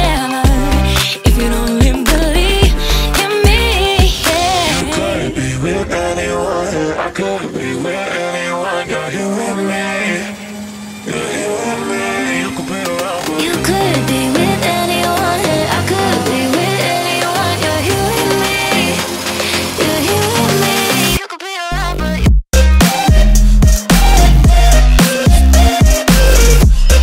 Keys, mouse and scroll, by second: 0.2-1.8 drag, 1.8-3.8 middle drag, 3.8 click, 4.7 click, 6.3 click, 7.3 click, 7.4 w, 11.0-12.6 drag, 13.5-15.8 middle drag, 15.8 ctrl+a, 20.3 shift+a, 21.7-22.2 middle drag, 22.2 Tab, 22.5 s, 23.8 s.